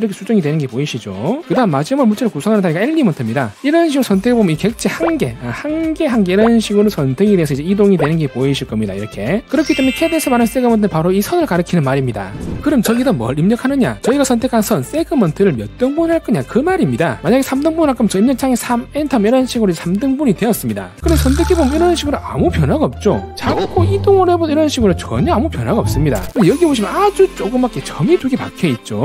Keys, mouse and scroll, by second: 4.8 click, 5.8 click, 6.4 click, 7.3 click, 7.9 click, 8.8 click, 10.1 click, 11.0 click, 11.7 click, 12.2 click, 18.9 3, 21.9 click, 23.3 right click, 23.6 click, 24.0 right click, 24.1 click, 24.8 click, 26.9 scroll up 2, 27.7 click, 28.2 click.